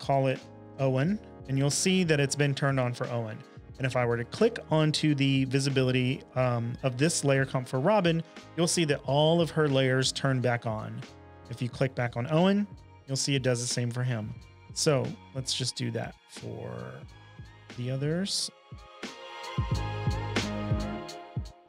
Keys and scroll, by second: 0.0-0.8 typing, 15.5 typing, 18.7-19.6 typing, 20.8-21.6 typing.